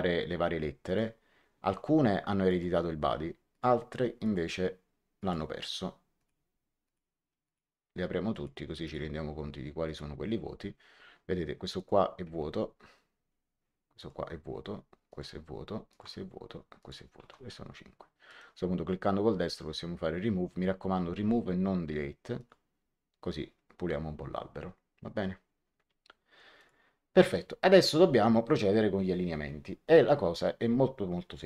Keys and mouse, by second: 0.8 click, 2.4 click, 3.4 click, 6.8 click, 9.8 click, 11.7 click, 13.9 ctrl+click, 15.0 ctrl+click, 18.2 right click, 22.3 click, 26.5 click.